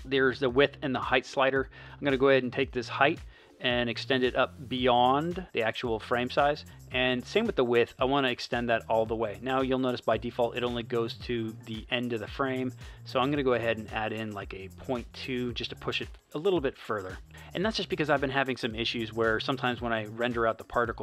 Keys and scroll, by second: 14.3 BackSpace, 14.9 2.